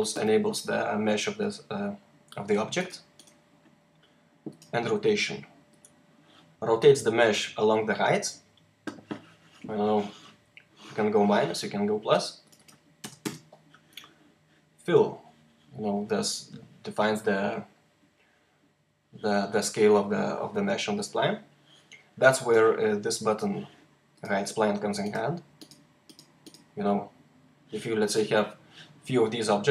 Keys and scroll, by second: 12.9 o, 13.1 Return.